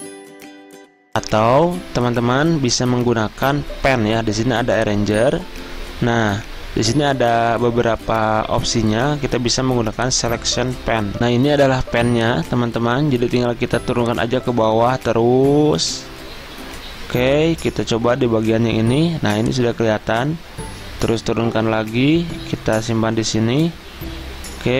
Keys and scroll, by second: 0.5 ctrl+x, 0.7 ctrl+z.